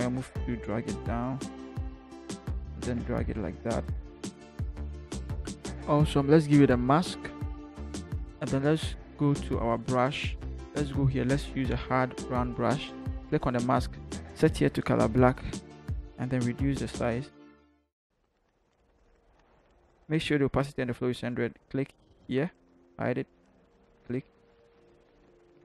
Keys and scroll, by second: 0.1 shift+Down, 0.6 shift+Down, 2.6 Left, 3.3 Left, 3.6 Left, 16.8 [, 17.1 [, 18.1 [.